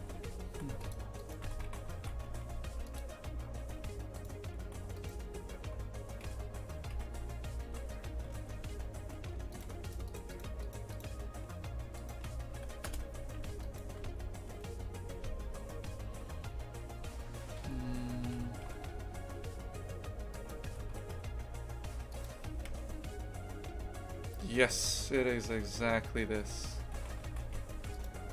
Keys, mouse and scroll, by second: 0.0 shift+f, 1.2 right click, 1.4 Tab, 1.7 shift+f, 4.2 shift+right click, 5.0-6.1 right drag, 6.1 g, 8.4 ctrl+z, 8.6 ctrl+z, 9.5 shift+right click, 9.9 shift+right click, 10.1 shift+right click, 10.3 shift+right click, 10.6 shift+right click, 10.9 shift+right click, 12.0 shift+right click, 12.9 p, 13.4 Tab, 13.6 right click, 14.0 Tab, 15.1 Tab, 17.9 a, 18.4 s, 20.7 Tab, 21.0 g, 22.7 KP_0, 24.6 KP_0, 27.0 shift+f.